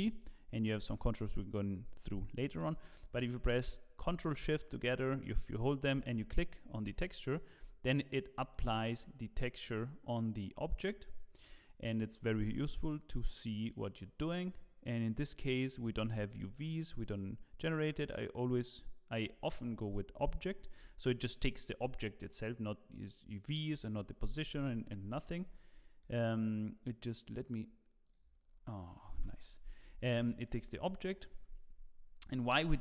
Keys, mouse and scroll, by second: 0.9 click, 2.3 middle click, 6.0 ctrl+shift+click, 7.5-8.3 scroll up 5, 8.5 shift+middle click, 9.2-10.5 scroll down 1, 10.5-10.9 scroll down 2, 11.5 shift+middle click, 12.4-13.5 scroll up 5, 12.8 middle click, 18.4 click, 20.7-21.4 scroll down 3, 24.3 middle click, 25.4-26.2 scroll down 10, 26.0 middle click, 28.0 click, 28.4 scroll up 5, 29.4 KP_0, 29.8 scroll up 3, 30.2 shift+middle click, 32.4 middle click.